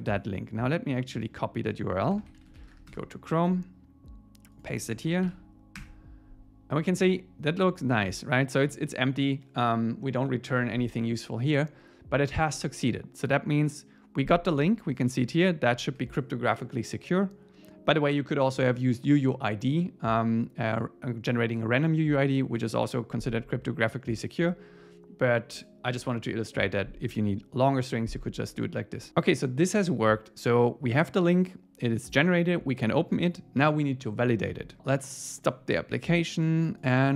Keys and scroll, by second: 2.9 Return, 5.3 super+v, 5.8 Return.